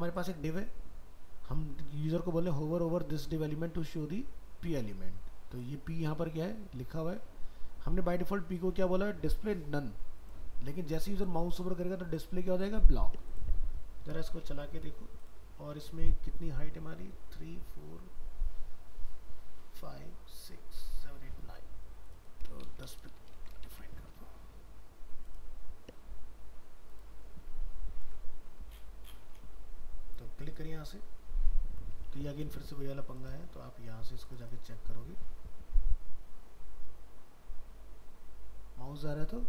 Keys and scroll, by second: 14.5 ctrl+s, 23.4 ctrl+s, 23.8 alt+Tab.